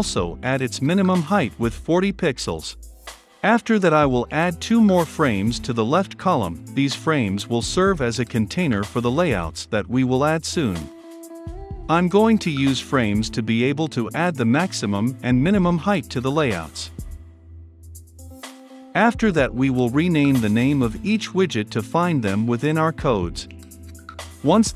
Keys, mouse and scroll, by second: 5.9 f, 6.0 r, 6.2 a, 6.3 m, 7.2-19.7 drag, 19.7-22.8 typing, 20.5 Return, 20.7-21.2 drag, 22.0 Return, 22.2 click, 23.2-24.7 drag.